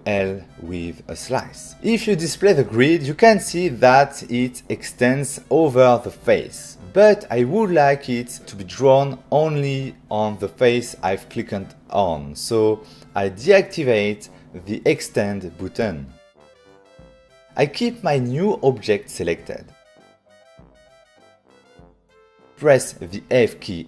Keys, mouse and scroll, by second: 1.6 click, 3.1 right click, 11.6 right click, 14.5 click, 15.7 right click, 17.7 middle click, 18.2 click, 18.3 click, 18.9 shift+click, 19.9 click, 20.1 click, 20.1 middle click, 20.4 ctrl+middle click, 20.6 click, 21.5 click.